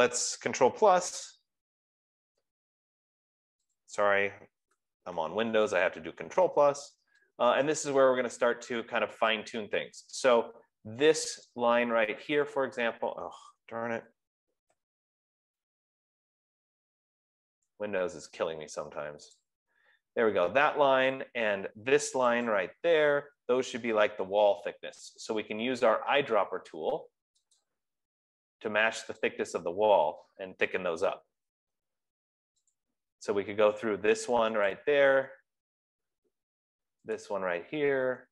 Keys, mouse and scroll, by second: 1.3 super+=, 4.2 super+click, 15.5-20.1 drag, 15.7 -, 22.9 shift+click, 27.9 click, 29.7 click, 33.2 click, 35.2 click, 37.5 shift+click.